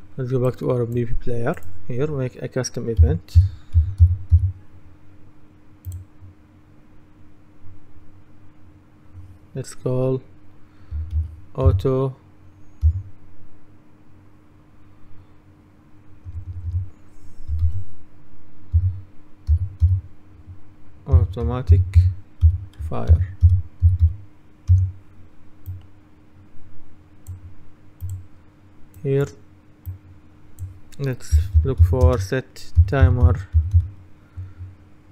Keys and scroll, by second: 3.6-4.9 typing, 11.2 shift+a, 11.7 u, 16.3 BackSpace, 17.7 shift+a, 18.8-24.6 typing, 31.2-34.3 typing.